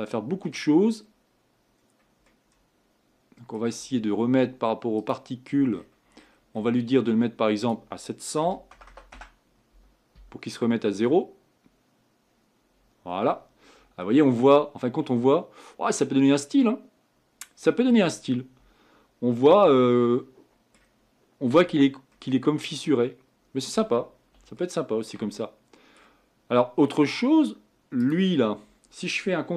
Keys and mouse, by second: 2.8 middle click, 3.2 middle click, 5.0-8.9 drag, 8.9 KP_0, 20.3-23.0 middle drag, 23.4 middle click, 24.6 middle drag, 25.4 middle click.